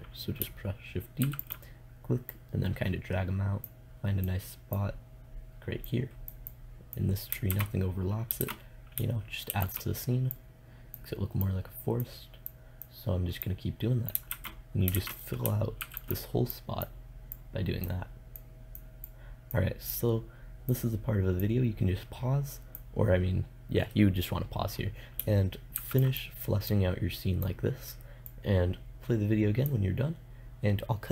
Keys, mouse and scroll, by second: 1.4 shift+d, 1.7-3.1 drag, 7.7 shift+z, 8.6 shift+z, 9.7 shift+d, 14.5 shift+z, 15.1 shift+z, 16.0 shift+d, 23.5 middle click, 25.9 shift+d.